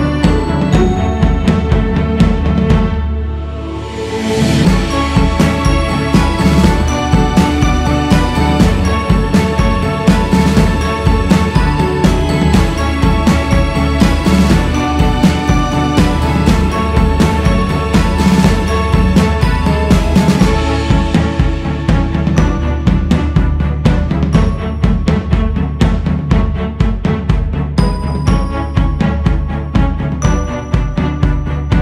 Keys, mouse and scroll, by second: 0.6 click, 1.8-2.4 scroll up 2, 2.4 f, 3.6-5.3 drag, 5.3-6.1 scroll down 3, 6.4 click, 6.8-7.5 scroll up 1, 7.5-8.7 drag, 8.7-9.8 scroll up 3, 10.0-11.2 drag, 11.2-12.4 scroll down 4, 12.4 shift+s, 13.4-16.9 drag, 16.9-17.7 scroll up 2, 17.7 q, 19.4 f, 20.9-22.8 drag, 22.8 shift+s, 24.1 f, 25.1-28.7 drag, 28.7 scroll down 3, 29.3 c, 29.7 f, 31.5-31.8 scroll up 2.